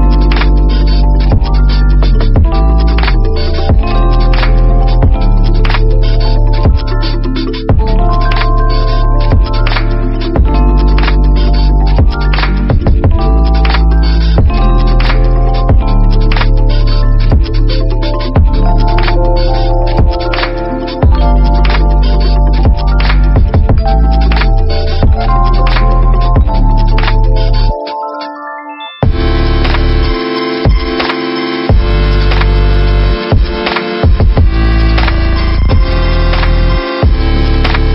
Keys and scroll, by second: 14.3 space, 17.1 t, 20.1 v, 26.9 ctrl+-, 29.9 t.